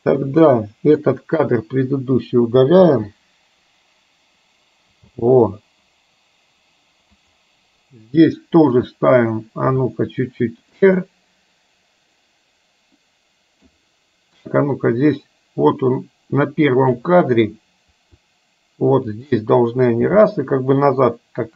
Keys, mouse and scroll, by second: 0.5-1.0 drag, 1.9 Delete, 2.9 space, 5.2 space, 7.2 click, 9.8 r, 10.9-13.7 middle drag, 14.5-17.0 drag, 17.9 r, 20.2 g.